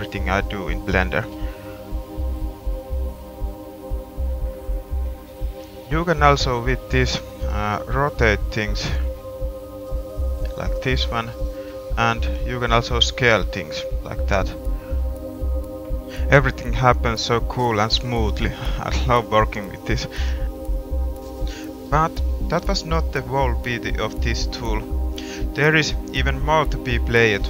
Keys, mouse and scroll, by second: 1.2-2.2 middle drag, 2.5-3.6 middle drag, 4.5 middle click, 5.1 middle click, 8.1 r, 8.6-10.2 scroll up 1, 11.4 middle click, 12.1 g, 13.2 s, 13.4 click, 13.6 click, 13.8 click, 18.4 g, 21.0 middle click, 23.4 click.